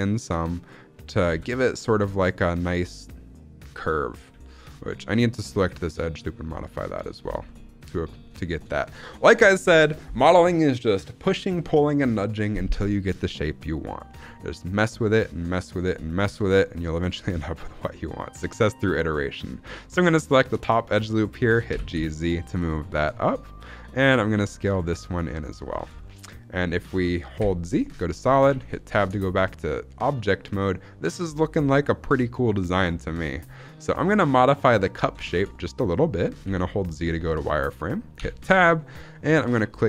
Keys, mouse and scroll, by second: 1.0 click, 1.2 g, 1.5 z, 1.6 click, 1.8 shift+middle click, 2.0-3.3 scroll up 2, 4.5 alt+click, 5.4 s, 6.8 click, 7.1 scroll down 2, 7.3 shift+middle click, 8.1-9.0 scroll up 4, 8.4 shift+middle click, 13.3-14.3 shift+middle drag, 14.3-16.1 scroll up 2, 16.9 alt+click, 17.3 shift+middle click, 21.6 g, 21.9 z, 23.9 click, 24.2 s, 25.3 click, 25.6 scroll down 2, 25.9 shift+middle click, 27.3 z, 28.1-28.4 scroll down 2, 28.4 Tab, 28.7-29.1 shift+middle drag, 29.1-29.4 scroll down 2, 29.4-30.1 shift+middle drag, 30.1 scroll up 2, 31.6-32.3 shift+middle drag, 32.8-33.2 scroll down 1, 33.2 scroll up 1, 35.1 shift+middle click, 35.3-35.7 shift+scroll up 2, 36.3 z, 38.1 Tab, 39.3-39.8 drag.